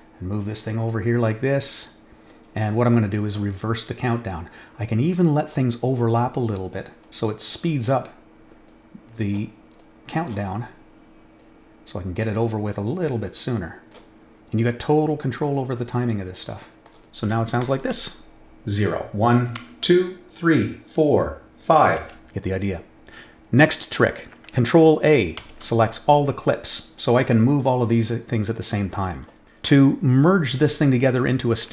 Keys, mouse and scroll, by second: 0.3-1.2 drag, 2.2-3.3 drag, 4.3-5.4 drag, 7.0-7.8 drag, 8.6-9.2 drag, 9.7-10.2 drag, 11.3 click, 12.8-13.9 drag, 14.5-15.9 drag, 17.6 click, 17.9 space, 22.0 space, 25.4 ctrl+a, 27.6-29.2 drag.